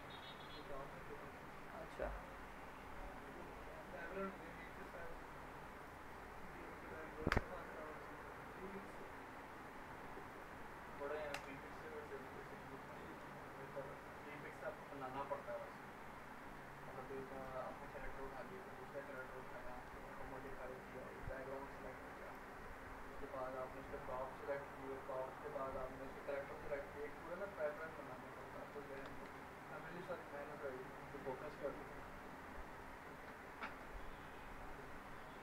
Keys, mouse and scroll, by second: 4.7 click, 4.8 click, 10.3 click, 11.3 ctrl+BackSpace, 12.4 scroll down 1, 12.9 alt+middle click, 17.3 click, 27.7 click, 28.4-29.0 middle click, 29.1 ctrl+z.